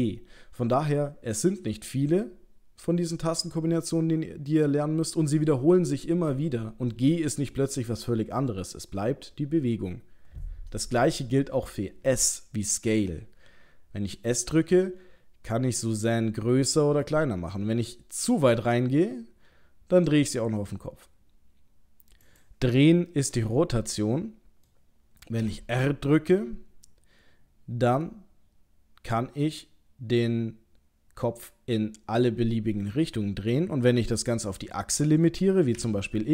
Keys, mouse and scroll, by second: 12.9 s, 23.1 middle click, 25.4 r.